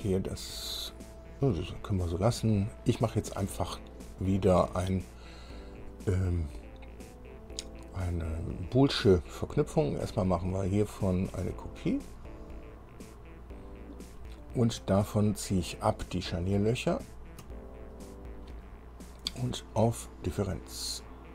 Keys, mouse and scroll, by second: 4.2-4.5 scroll down 2, 10.7 click, 12.1 click, 12.9-13.2 scroll down 2, 13.8 click, 17.3 ctrl+click.